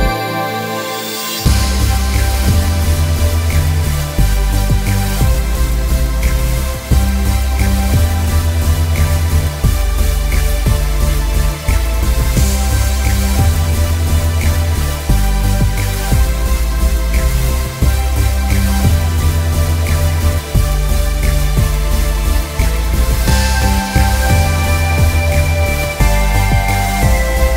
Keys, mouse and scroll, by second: 0.0-1.2 scroll down 1, 2.6 click, 3.4 alt+scroll up 1, 4.2 click, 5.3 space, 7.2 click, 13.9 click, 21.8 click, 24.1 z, 24.2 click.